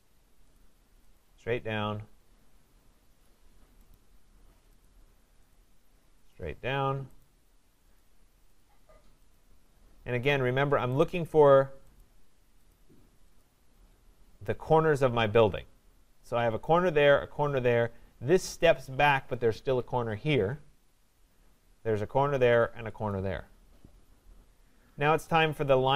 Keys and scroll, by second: 6.4 Return.